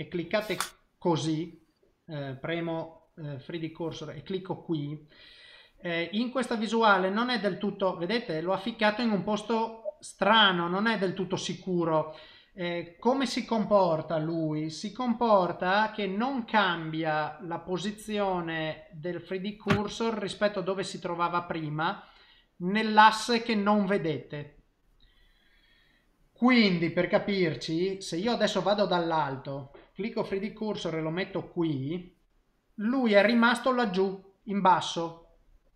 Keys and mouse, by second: 0.3 click, 1.2 click, 2.5 click, 4.0 click, 6.9 middle click, 9.1 middle click, 10.3 middle click, 12.5 middle click, 20.0 middle click, 26.0 middle click, 28.2 KP_7, 30.0 click, 31.4 click, 32.5 middle click.